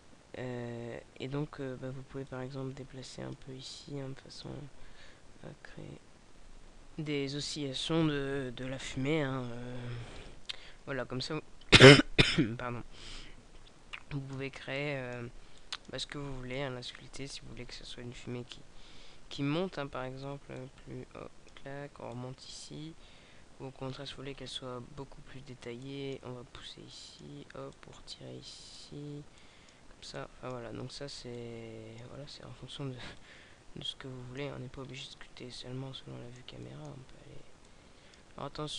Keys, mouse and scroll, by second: 2.3 click, 6.2 click, 13.9 click, 19.3-20.6 scroll down 3, 20.6 click, 23.8-25.8 scroll up 4, 25.8-33.1 click, 33.1 middle click, 34.7 scroll up 3, 35.2 middle click, 35.2 scroll up 1, 36.5 scroll up 1, 36.6 middle click, 37.6 click.